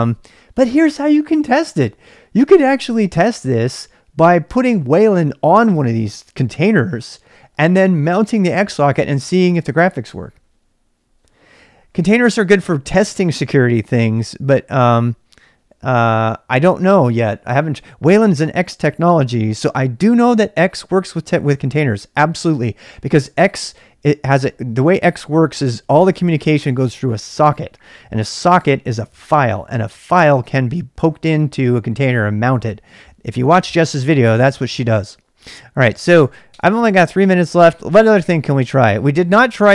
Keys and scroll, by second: 0.0-39.7 typing.